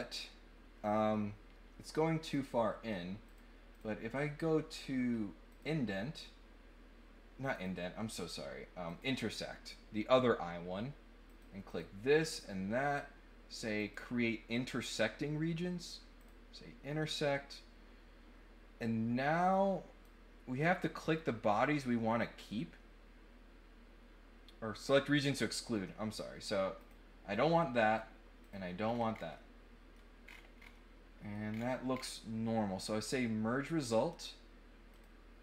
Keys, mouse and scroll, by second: 2.2 click, 3.2 click, 3.7 click, 5.5 click, 7.5 click, 8.8 click, 11.2 click, 11.6 click, 12.2 click, 13.7 click, 16.2 click, 19.5 click, 25.8 middle click, 26.8 click, 27.3 middle click, 28.4 click, 28.8 scroll up 4, 29.1 scroll down 2, 29.3 middle click, 30.2-30.6 scroll up 6, 30.7 middle click, 31.4-32.0 scroll down 4, 34.8 click.